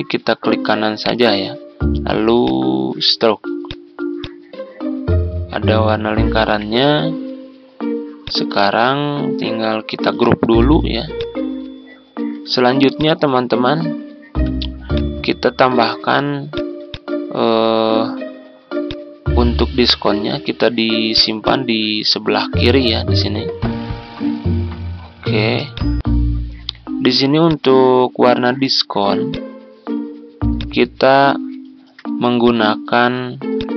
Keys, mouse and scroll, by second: 1.0-2.1 right drag, 2.4-6.1 drag, 6.4 Delete, 8.2 click, 10.4 ctrl+g, 11.1 click, 12.1 ctrl+scroll down 1, 13.1 click, 14.1 ctrl+scroll down 1, 14.9-19.8 drag, 20.0 ctrl+z, 21.1 click, 24.8 ctrl+scroll down 1, 25.6-33.7 drag.